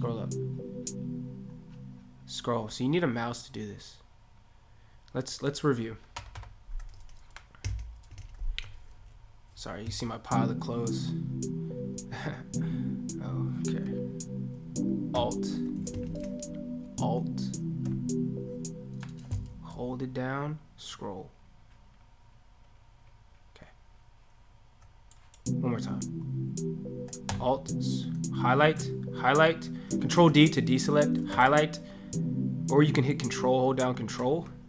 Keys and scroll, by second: 28.6 ctrl+a, 30.2 ctrl+d, 31.3 ctrl+a.